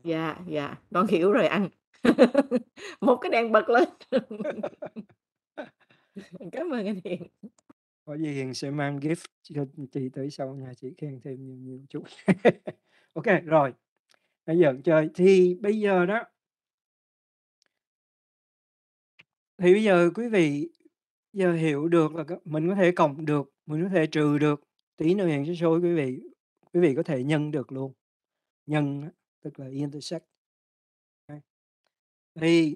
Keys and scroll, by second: 15.3 Return.